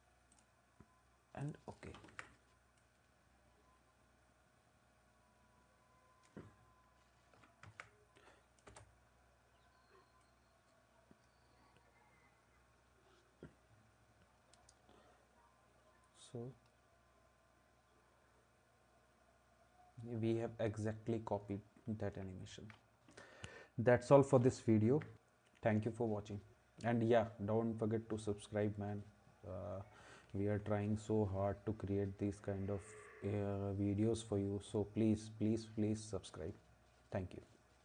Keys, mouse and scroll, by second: 0.3-1.3 drag, 1.4 click, 2.1 ctrl+s, 7.7 ctrl+s, 8.2 click, 8.7 space, 22.5 ctrl+s, 25.0 ctrl+s.